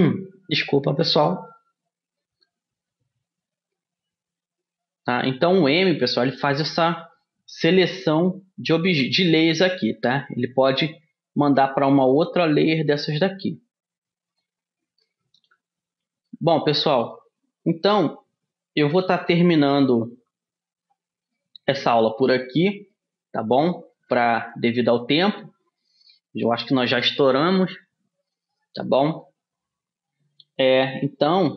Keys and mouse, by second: 11.1-14.7 drag, 15.6-19.9 middle drag, 19.9 a, 22.1 middle click, 25.1-26.4 middle drag, 29.7-31.5 middle drag.